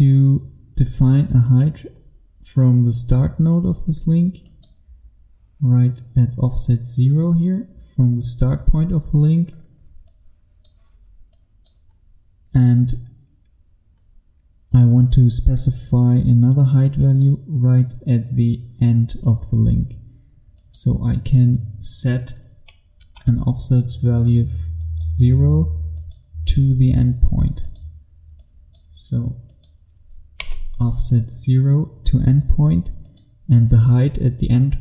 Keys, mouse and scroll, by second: 4.6 click, 7.3-8.4 scroll down 1, 10.2 click, 12.0-16.1 scroll up 1, 17.0 click, 23.0 KP_0, 24.8 click, 30.5 KP_0, 33.1 click.